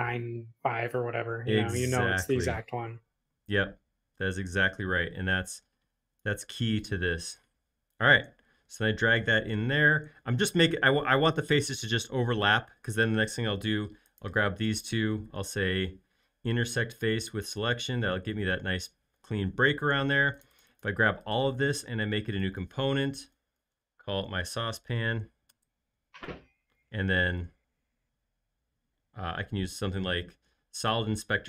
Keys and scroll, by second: 7.4 space, 23.3-25.4 typing, 25.5 Return.